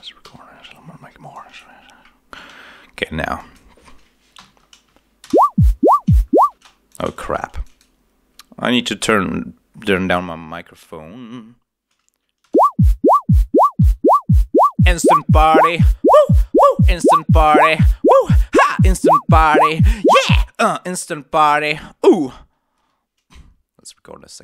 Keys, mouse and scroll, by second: 0.7 alt+scroll down 3, 1.7-2.2 scroll down 2, 3.3 click, 4.3 7, 5.4 shift+space, 6.4 space, 6.8 shift+click, 7.0 shift+right click, 7.5 shift+click, 12.6 shift+space, 13.7 7, 22.8 space.